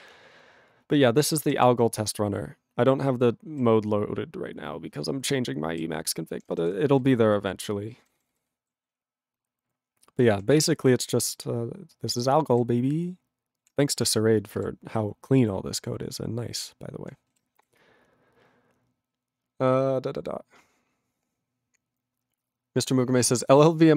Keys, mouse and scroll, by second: 0.3 ctrl+p, 1.3 ctrl+n, 1.6 ctrl+v, 1.6 ctrl+n, 6.3 ctrl+p, 6.4 ctrl+space, 6.5 ctrl+n, 6.6 ctrl+g, 6.6 ctrl+n, 8.9 ctrl+p, 10.8 ctrl+v, 10.9 ctrl+n, 14.6 ctrl+g, 15.0 ctrl+p, 17.8 Return.